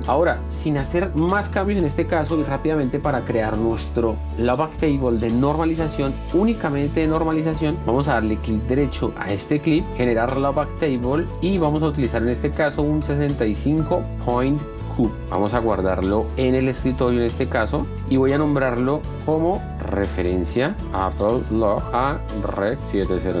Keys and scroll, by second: 7.8 F1, 15.0 F1, 19.4-23.4 typing.